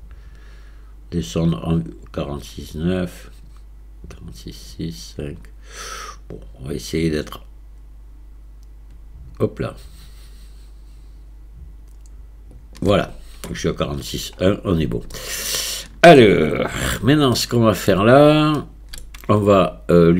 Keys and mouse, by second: 15.2-16.2 shift+drag, 17.5 shift+click, 18.6-19.0 shift+drag.